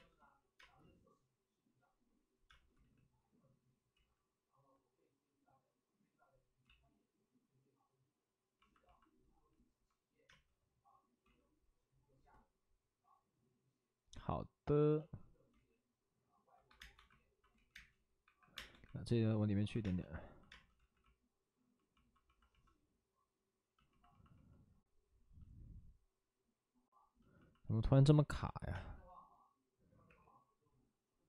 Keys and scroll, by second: 0.1 ctrl+z, 0.5 space, 2.4 space, 2.7 ctrl+z, 6.6 ctrl+z, 10.2 ctrl+z, 10.2 space, 15.4 ctrl+z, 16.6-18.6 typing, 17.5 ctrl+z, 19.7 space, 20.7 space, 20.7 ctrl+z, 25.6 space, 26.2 ctrl+z, 28.6 space, 30.0 3.